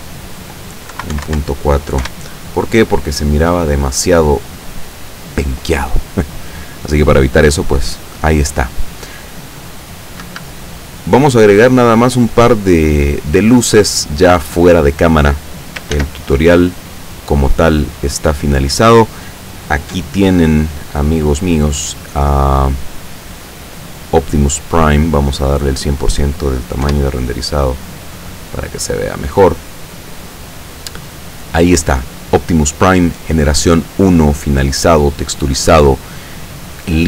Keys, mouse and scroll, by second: 0.0 click, 1.0 KP_Decimal, 1.2 KP_4, 1.3 KP_Enter, 2.0 F12, 5.3-6.1 scroll up 4, 6.2-6.7 scroll down 2, 6.9 scroll down 2, 7.8-8.6 middle drag, 10.2 Escape, 11.0-11.3 scroll down 2, 14.0-14.3 scroll down 2, 16.0 ctrl+s, 16.4 ctrl+click, 21.4-22.1 scroll up 3, 23.1 click, 23.5-23.9 scroll up 2, 24.5-25.4 drag, 26.9 F12, 27.9-28.6 scroll down 3, 29.1 scroll up 2, 34.0-36.2 scroll down 2.